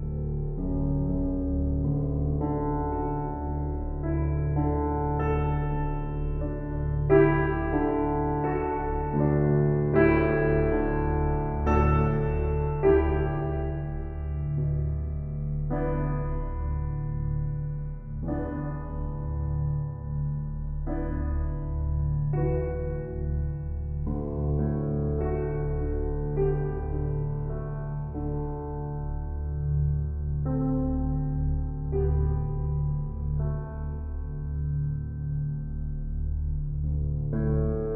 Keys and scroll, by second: 4.6 s, 10.0 shift+s, 14.1 s, 16.8 shift+s, 25.7 F4, 36.1 shift+s.